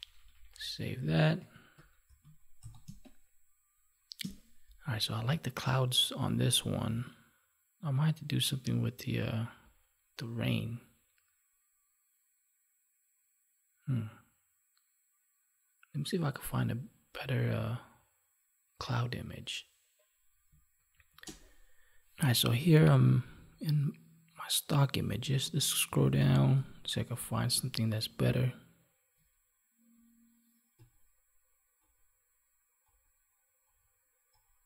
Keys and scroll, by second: 1.7 ctrl+=, 2.8 space, 20.8 F9.